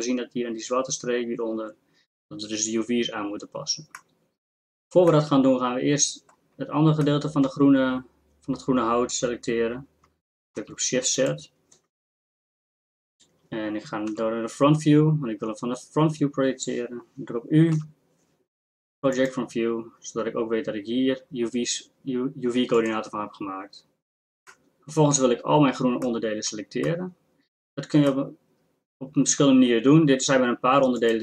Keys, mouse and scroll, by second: 10.6 shift+z, 12.3 ctrl+KP_Add, 14.1 KP_1, 17.7 u, 20.9 drag, 22.7 click, 23.7 click.